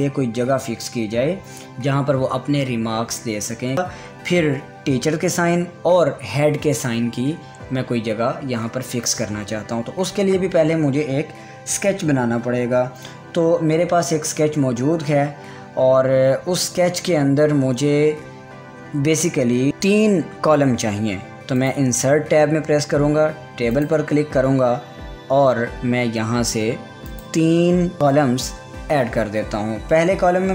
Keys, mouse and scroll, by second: 22.2 click, 24.3 click, 27.7 click.